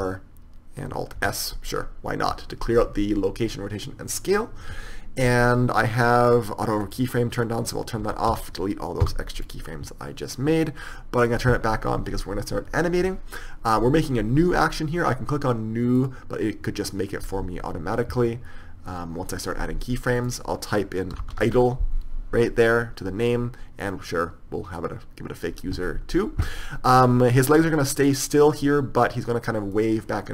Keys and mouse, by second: 1.5 alt+s, 9.8 a, 9.8 x, 16.4-27.3 drag, 27.3-27.8 right drag, 27.8-30.1 middle drag, 30.1-30.3 right drag.